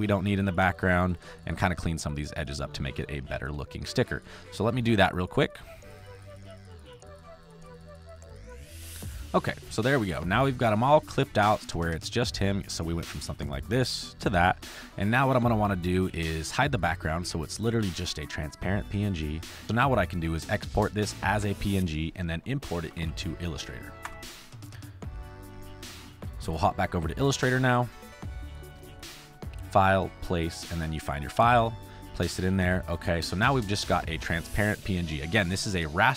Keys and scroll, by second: 2.9 space, 6.8 space, 7.9 ctrl+z, 8.3 space, 8.6 space, 10.0 space, 17.7 v, 22.4-23.5 typing, 24.0 Return, 33.5 space.